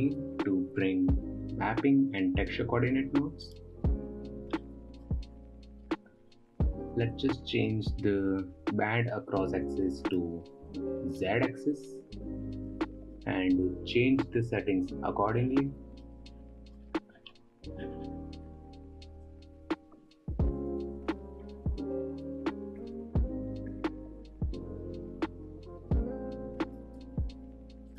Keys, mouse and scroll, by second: 1.3 ctrl+t, 3.9 click, 5.1 middle click, 5.9-6.5 scroll up 6, 10.5-13.6 drag, 19.7-22.8 drag.